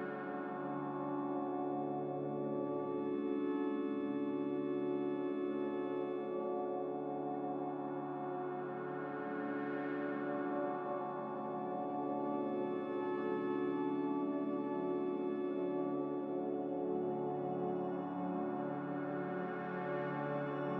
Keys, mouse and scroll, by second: 16.9 ctrl+c, 17.1 ctrl+v.